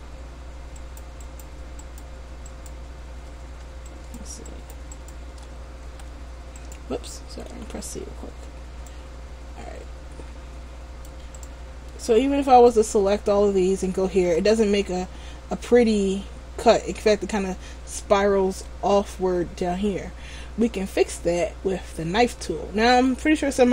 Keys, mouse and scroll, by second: 0.9 alt+right click, 2.0 alt+right click, 2.6 alt+right click, 4.0 alt+shift+right click, 4.1 alt+shift+right click, 6.1 x, 7.7 c, 11.6 right click, 12.0 middle click, 20.3-20.8 scroll down 1, 20.8 middle click.